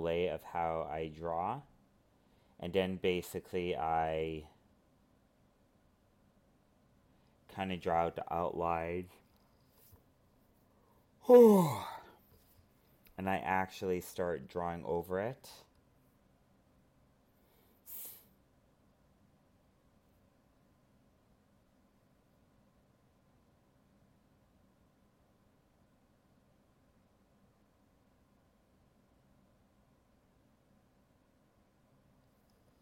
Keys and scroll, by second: 0.0 alt+space, 3.1 alt+space, 5.5 ctrl+z, 7.8 alt+space, 9.4 alt+space, 11.6 ctrl+z, 16.9 alt+space, 25.2 alt+space, 29.0 ctrl+z, 30.6 ctrl+z, 32.4 ctrl+z.